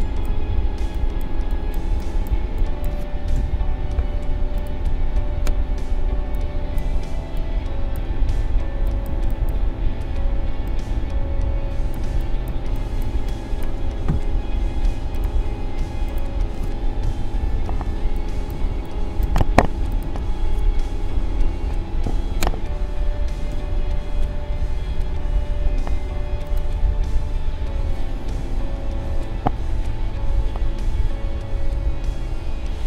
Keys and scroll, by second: 14.1 a, 17.9 space, 22.3 ctrl+shift+a, 23.5 ctrl+0, 25.6 a.